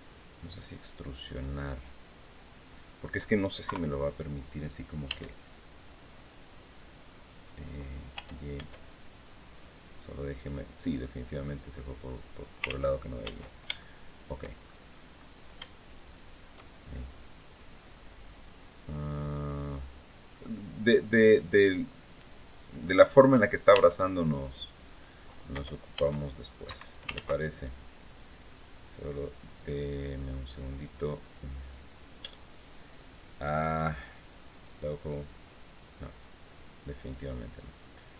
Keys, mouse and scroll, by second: 0.3-2.9 middle drag, 3.4 KP_3, 4.8 e, 7.9 y, 10.2 click, 10.5 scroll down 2, 10.8 middle click, 12.0 scroll up 2, 12.4 ctrl+z, 13.5 ctrl+shift+click, 14.4-15.1 shift+scroll up 4, 15.8 shift+right click, 16.4-16.7 shift+scroll down 2, 17.7-20.2 drag, 23.4 e, 25.3 y, 26.4 Escape, 26.9 ctrl+z, 28.3 click, 29.5 click, 31.6 click, 34.3 click, 36.4 click, 36.8 click.